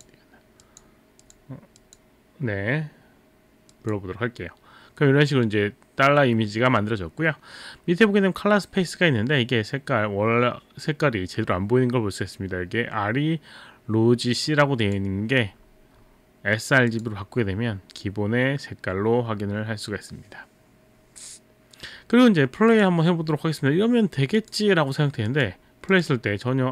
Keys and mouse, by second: 0.6 click, 1.2 click, 1.8 click, 3.7 click, 14.9 click, 16.9 click, 22.7 click, 24.4 click, 25.2 click, 25.9 click.